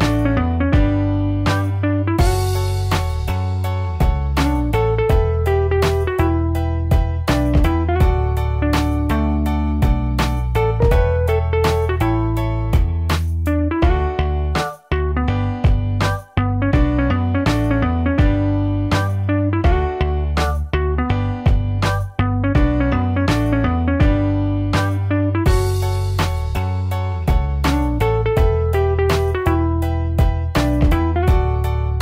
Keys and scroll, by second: 13.6 ctrl+t.